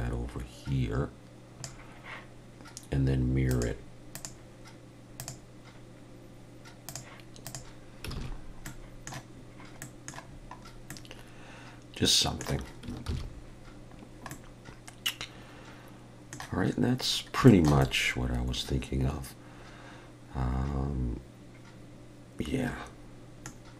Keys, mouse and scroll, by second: 3.5 click, 5.3 click, 6.9 click, 8.2 alt+a, 8.4-8.7 scroll down 2, 8.7 middle click, 9.4 scroll down 1, 9.8 middle click, 10.3-10.9 scroll down 4, 10.9 middle click, 11.9 scroll down 1, 13.1 ctrl+s, 14.0-14.3 scroll down 1, 14.3 middle click, 17.1 scroll down 1, 17.5 shift+middle click, 17.8 middle click, 23.7 scroll down 1.